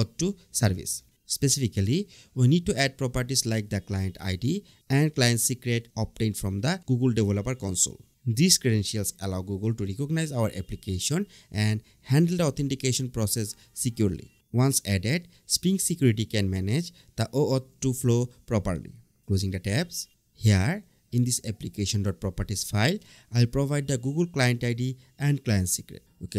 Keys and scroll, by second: 22.5 Return.